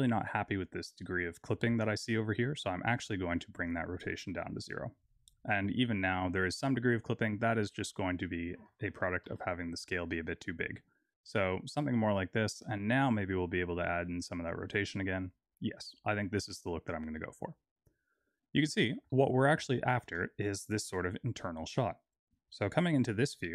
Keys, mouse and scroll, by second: 0.8 click, 1.1 click, 3.4 click, 7.2-7.9 scroll down 1, 7.9 click, 7.9-8.5 scroll down 2, 12.8 click, 17.6 scroll down 1, 18.4-19.0 scroll down 1, 19.0 shift+middle click, 23.0 scroll up 1.